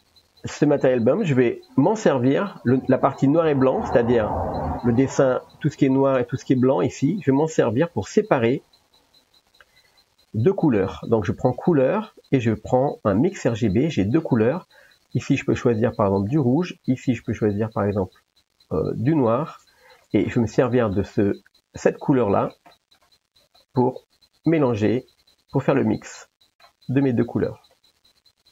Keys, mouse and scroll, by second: 0.6 click, 0.9 middle click, 4.1 shift+click, 5.2 middle drag, 7.4 middle click, 9.4 shift+click, 10.2 shift+a, 15.2 click, 17.2 click, 20.0 middle click, 20.9 middle click, 22.8 middle click, 23.7 middle click, 24.7-25.9 drag, 26.2 middle click, 27.9-28.5 drag.